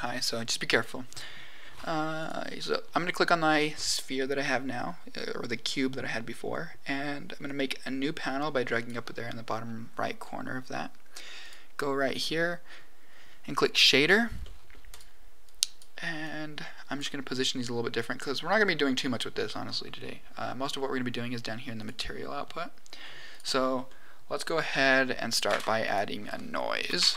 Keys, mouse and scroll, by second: 2.1 click, 7.4-8.9 drag, 11.3 click, 13.6 click, 14.4 middle click, 14.8 click, 15.4 click, 16.2 click, 23.3 click, 23.8 middle click, 24.9 middle click, 25.2 click, 25.4 shift+a.